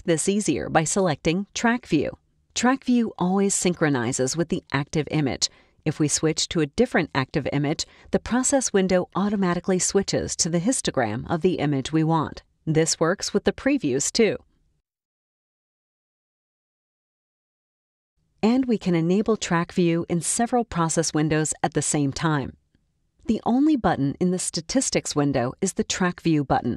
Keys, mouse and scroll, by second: 2.5 click, 5.8 click, 7.0 click, 8.2 click, 9.3 click, 10.7 drag, 12.0 click, 13.6 click, 14.6 click, 15.4 click, 16.2 click, 19.9 click, 24.8 click.